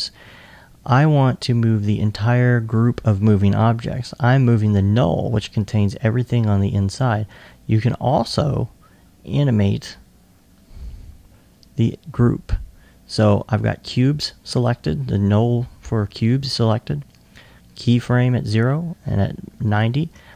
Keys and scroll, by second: 20.2 r.